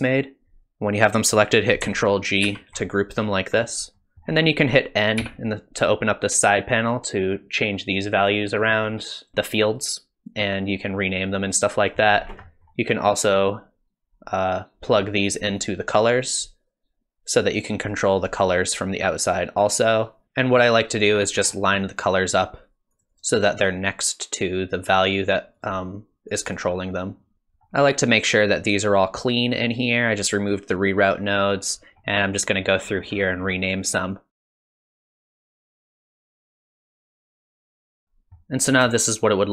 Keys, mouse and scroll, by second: 2.4 ctrl+g, 3.2-3.7 scroll up 8, 3.9-4.2 scroll down 3, 4.0 middle click, 4.1 middle click, 4.1 scroll up 1, 5.2 n, 6.8-8.2 click, 7.9 click, 8.1 click, 8.6 click, 9.2 click, 11.5 middle click, 12.3-13.5 scroll down 3, 12.5 middle click, 13.5 click, 15.6 click, 17.4 click, 19.2 click, 21.1-22.0 scroll down 7, 22.0 click, 22.0-22.4 scroll down 3, 22.9 click, 23.1 click, 23.3 click, 25.6 click, 26.3 click, 26.5 click, 27.3 scroll down 1, 31.8-32.5 scroll up 4, 32.5-33.1 scroll down 8, 33.1-34.4 scroll up 7, 34.5 click, 35.1 click, 35.4 click, 35.7 click, 35.7 scroll down 2, 35.9 click, 36.0 click, 36.4 click, 36.6 click, 36.6 scroll down 2, 36.7 click, 36.8 click, 37.1 click, 37.6 Tab, 37.6 click, 37.7 middle click, 37.7 scroll down 1, 37.8 middle click, 37.9 n, 38.0 middle click, 39.1 shift+click.